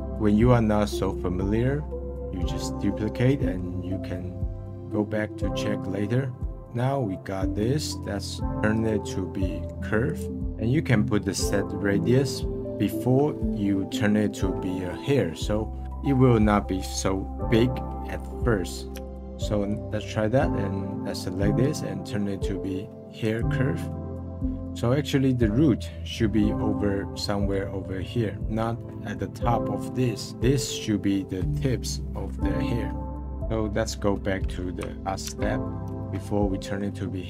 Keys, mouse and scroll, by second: 3.4-5.3 middle drag, 6.0-8.7 middle drag, 8.7-10.4 right drag, 13.9-15.5 middle drag, 18.5-19.0 middle drag, 19.0 click, 19.1 click, 21.6-23.9 right drag, 23.9-24.6 middle drag, 25.1 scroll up 1, 26.4 middle click, 26.9-27.3 scroll down 1, 27.3-32.6 middle drag, 33.0-34.3 scroll down 1, 35.0 ctrl+z, 35.5 ctrl+z, 36.5-37.2 middle drag.